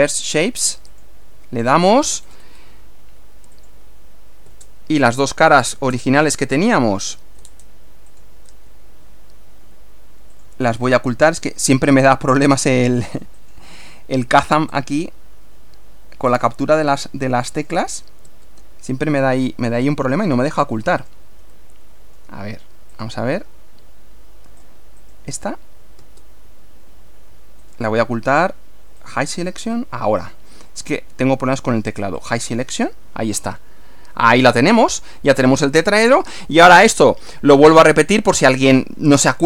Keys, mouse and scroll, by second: 0.9 click, 2.2-2.7 scroll down 2, 3.6 click, 4.5 space, 5.1 click, 5.7 space, 7.1 click, 7.4 space, 8.1 click, 8.5 space, 10.3 click, 11.5 space, 13.4 click, 14.7 space, 16.3 click, 17.6 click, 18.3 space, 19.5-20.9 middle drag, 21.0 click, 21.5 middle click, 22.9 click, 25.1 click, 26.0 space, 27.7 right click, 29.0 click, 30.2 click, 32.2 click, 33.4-36.9 middle drag, 38.7 scroll down 1.